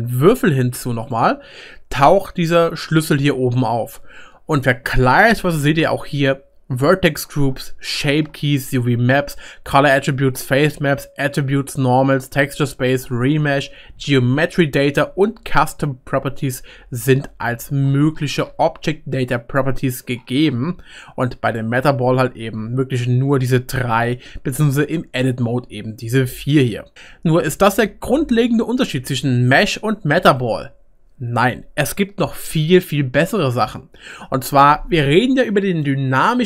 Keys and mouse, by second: 6.5-11.7 middle drag, 21.5 click, 24.8 Tab, 26.9 Tab, 29.5 click, 29.7-34.8 middle drag, 34.8-36.4 right drag, 35.2 middle click.